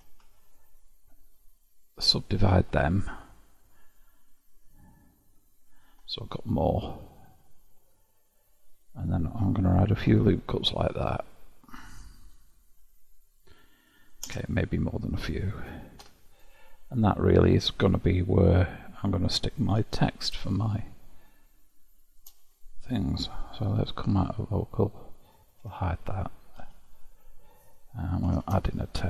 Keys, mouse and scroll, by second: 0.0 2, 0.5 alt+click, 2.0 alt+shift+click, 2.9-5.9 right drag, 6.1-9.1 middle drag, 9.9 ctrl+r, 14.9-16.0 middle drag, 16.0 Tab, 17.1-19.8 middle drag, 19.8 KP_7, 20.6-23.6 shift+middle drag, 23.7 KP_Divide, 25.2 click, 25.6 h, 26.1 click, 26.6 KP_7, 28.4 shift+a.